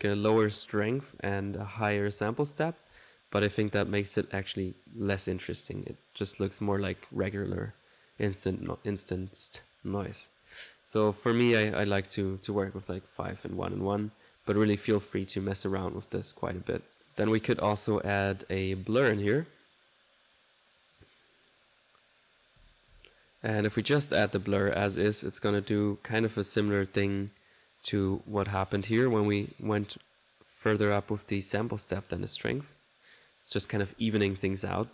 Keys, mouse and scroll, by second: 1.4 click, 11.7 ctrl+click, 12.5 click, 13.0 click, 13.6 ctrl+1, 15.9 click, 17.0 right click, 17.7-19.2 drag, 21.6 right click, 22.1 click, 23.5-24.3 typing, 23.8 click, 24.4 click, 25.8-27.2 drag, 28.5 click, 32.3 click, 33.2 click.